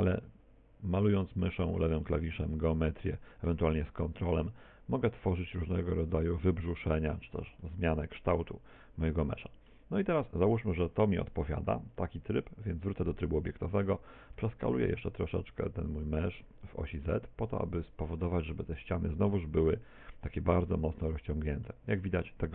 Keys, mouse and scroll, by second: 3.9 ctrl+click, 7.7 middle click, 12.0 click, 13.4 middle click, 14.1 s, 18.0 click, 18.9 middle click, 20.6 Tab, 21.2 middle click.